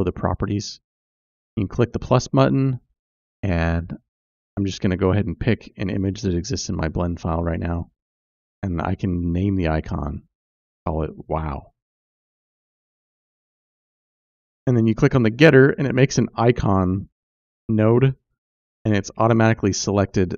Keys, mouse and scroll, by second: 1.6-3.9 drag, 5.9 click, 6.1-12.5 drag, 7.3 BackSpace, 13.2-15.4 drag, 16.7 click, 18.0 click, 18.9 click.